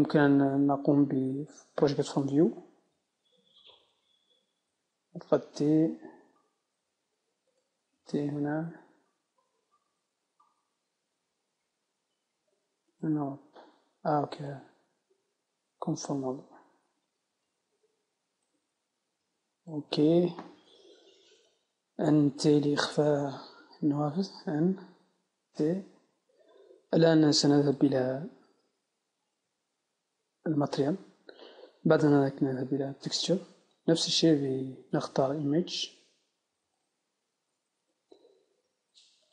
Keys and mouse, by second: 7.6-11.4 drag, 7.6 t, 8.0 t, 11.4 u, 18.5-39.3 drag, 22.3 n, 22.9 t.